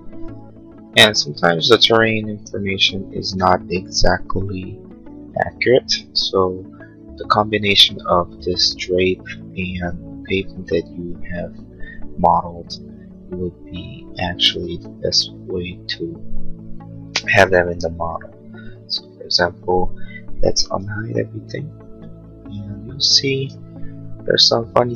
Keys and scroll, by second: 20.7 shift+u.